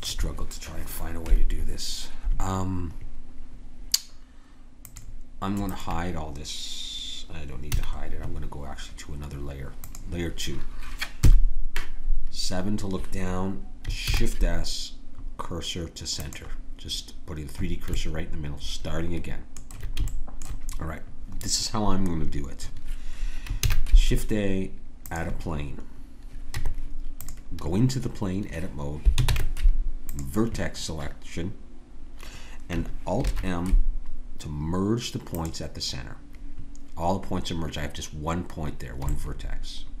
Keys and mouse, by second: 4.8-7.7 drag, 7.7 a, 9.8-11.3 drag, 11.2 KP_7, 14.0 shift+s, 18.0-20.3 middle drag, 23.6 shift+a, 26.0 middle click, 26.6 Tab, 29.3 ctrl+Tab, 33.2 alt+m, 39.1 middle click, 39.6-40.0 middle drag.